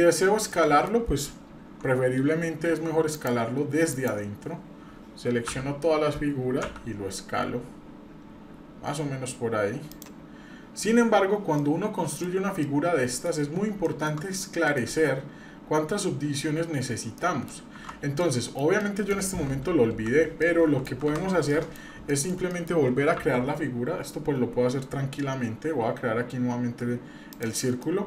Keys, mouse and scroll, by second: 0.6 shift+middle click, 3.1-4.1 drag, 5.5 a, 6.6 s, 11.6 middle click, 12.3 scroll down 1, 12.6 middle click, 13.4-14.5 scroll up 3, 13.8 shift+middle click, 14.6 middle click, 16.6-17.5 scroll down 4, 17.2 middle click, 18.2-18.6 middle drag, 18.8-19.1 middle drag, 19.1 scroll down 1, 19.8 End, 20.4 middle click, 20.9 Delete, 21.0 Delete, 21.5 middle drag, 22.1-22.7 shift+middle drag, 23.2 shift+a, 27.8 middle click.